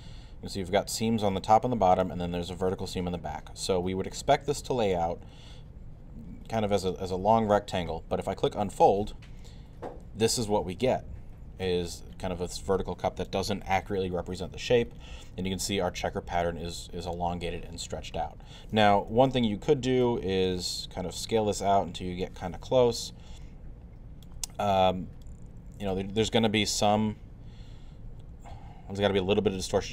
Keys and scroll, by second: 19.1 r.